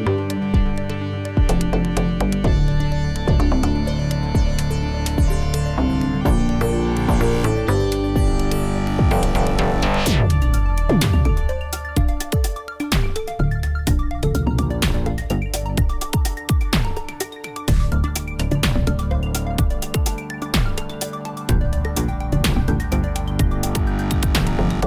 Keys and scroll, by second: 0.3 shift+r, 3.6 r, 3.9 z, 7.0 r, 7.4 z, 10.2 r, 10.6 z, 15.5 shift+d, 19.1 r, 19.4 y, 24.1 r, 24.4 z.